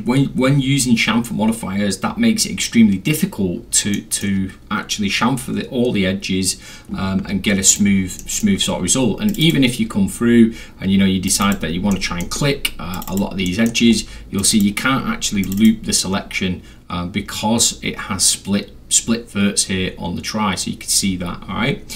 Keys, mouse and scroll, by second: 4.0 middle click, 7.7 click, 8.2 middle drag, 9.3 click, 9.4 click, 11.3 click, 11.4 click, 11.9 alt+middle click, 13.0 alt+click, 13.1 alt+click, 13.5 middle click, 13.9 scroll up 2, 14.4 click, 14.5 click, 14.6-15.2 scroll, 15.5 click, 15.6 click, 21.0 scroll down 2, 21.2 scroll, 21.3 scroll down 2, 21.4-21.9 scroll.